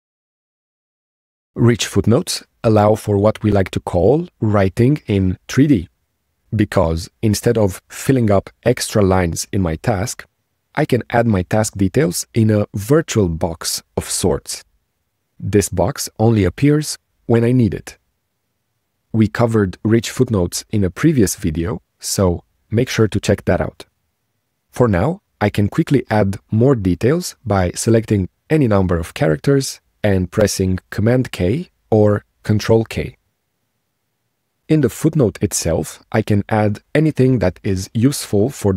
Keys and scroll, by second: 32.7 super+k.